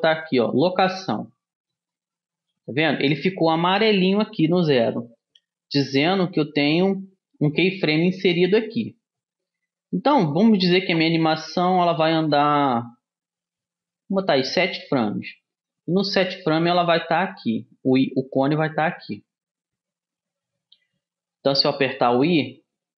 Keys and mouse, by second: 11.7-13.7 drag, 16.0-18.0 drag, 22.3 i.